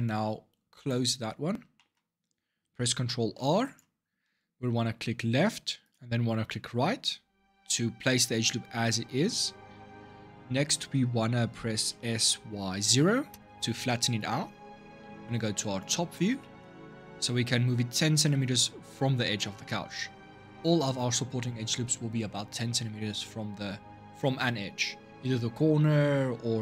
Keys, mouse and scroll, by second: 1.5-3.0 shift+middle drag, 3.0 ctrl+r, 11.7 s, 15.6 click, 16.2 shift+middle click, 16.6-17.7 scroll up 4, 19.5-22.5 shift+middle drag.